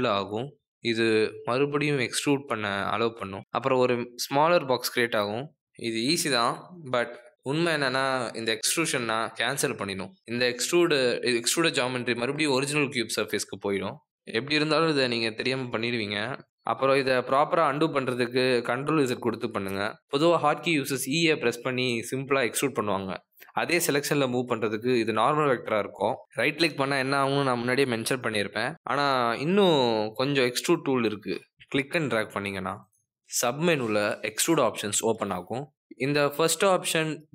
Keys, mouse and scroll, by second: 0.3 s, 3.1 click, 7.7 click, 9.3 ctrl+z, 14.3 click, 15.2 click, 16.5 e, 20.8 s, 22.0 e, 28.2 click.